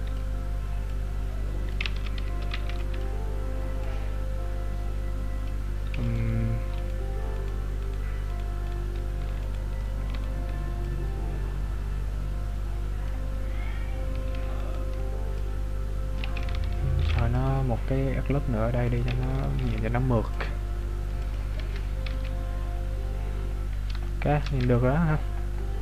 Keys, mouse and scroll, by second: 0.9 click, 2.0 ctrl+z, 2.7 b, 3.9 click, 6.1 alt+right click, 7.4 alt+right click, 10.8 click, 14.6 alt+right click, 15.4 click, 17.0 ctrl+r, 21.7 Tab, 22.0 z, 22.5-24.1 scroll down 17, 24.1 shift+middle click, 24.9 scroll up 1.